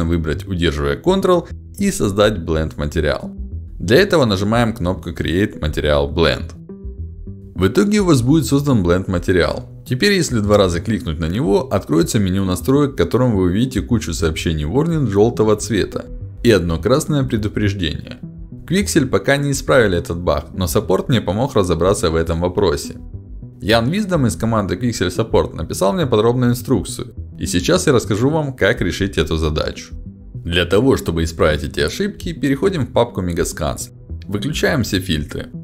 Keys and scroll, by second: 12.0 ctrl+alt+d.